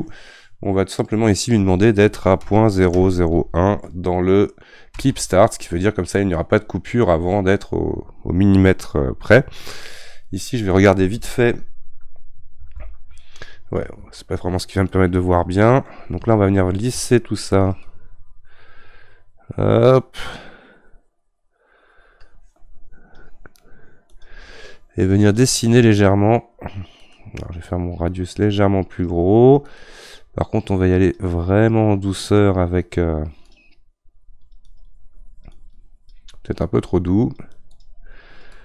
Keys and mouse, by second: 12.8 shift+z, 14.0 shift+z, 14.9-17.4 middle drag, 17.4-20.8 shift+drag, 24.1-27.9 shift+drag, 27.9-34.2 right drag, 34.2-37.0 drag, 37.0-38.2 right drag, 38.2-38.6 drag.